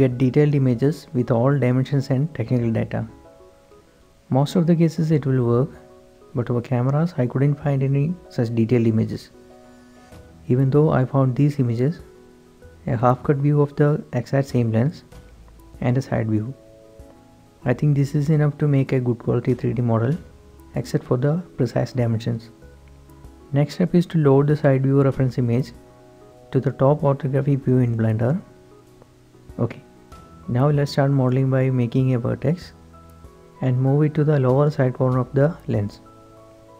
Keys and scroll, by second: 0.0-2.3 typing, 2.4 Return, 22.7-24.1 typing, 31.3 shift+a, 35.6 Tab, 35.7 g.